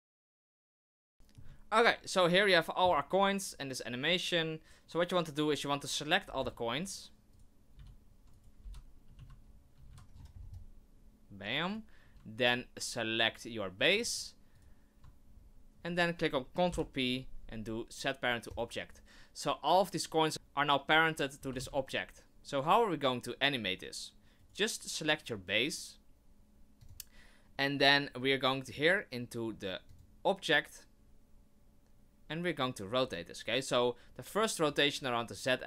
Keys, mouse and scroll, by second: 0.0-1.0 typing, 0.2 right click, 0.3 Right, 0.9 right click, 1.1 shift+middle click, 1.1 scroll down 1, 6.2 scroll down 4, 6.4 c, 7.3 right click, 7.7-9.7 typing, 13.9 shift+click, 14.5 shift+right click, 15.3-16.3 scroll up 1, 16.3-16.7 scroll up 1, 16.7 ctrl+p, 20.3 right click, 20.3 r, 21.4 r, 24.4 right click, 26.8 click, 29.9 click, 34.6 right click.